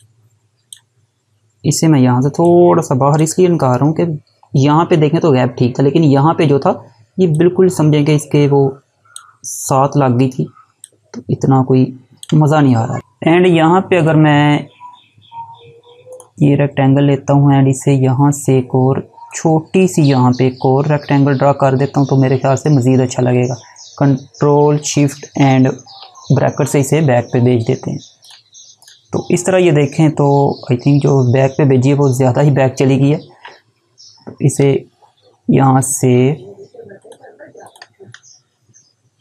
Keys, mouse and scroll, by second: 2.0 click, 6.9 click, 10.4 ctrl+click, 12.6 click, 18.5 click, 27.5 click, 33.7 right click, 36.2 click, 37.3 right click.